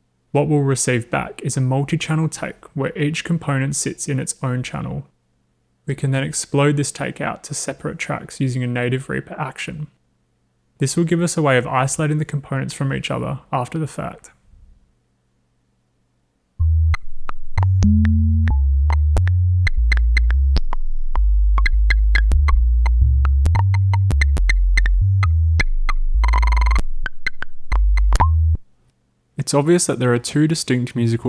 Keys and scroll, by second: 29.0 space.